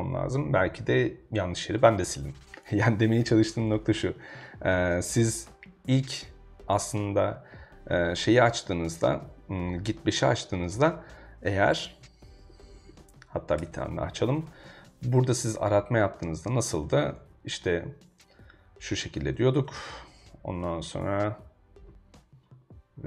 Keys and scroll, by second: 12.5 super+g, 12.5-13.4 typing, 13.6 Return, 16.0 super+Tab, 17.2 super+c, 19.3 super+c, 19.6 super+Tab, 21.0 ↺.